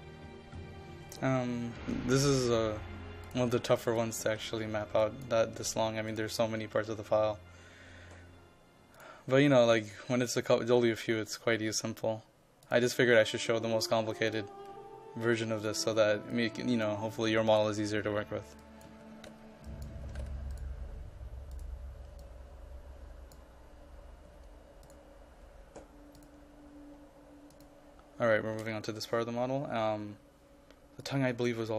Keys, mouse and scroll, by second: 4.3-5.7 typing, 5.1 click, 6.2 click, 11.0 KP_5, 11.8-17.5 drag, 18.9-20.2 typing, 19.7 click, 20.6-23.6 drag, 24.3 KP_5, 24.9-31.7 drag.